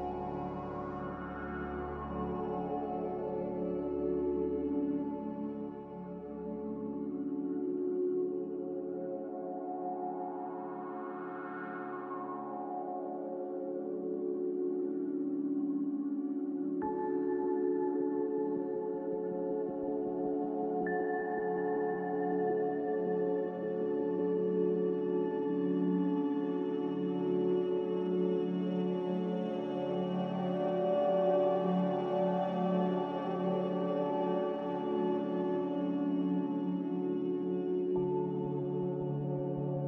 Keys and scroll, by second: 0.3 ctrl+z, 0.8 ctrl+z, 9.9 a, 12.4 ctrl+c, 15.4 Escape, 18.8-19.5 typing, 30.3 2, 31.1 3, 37.4 2, 37.6 Return, 38.4 Return.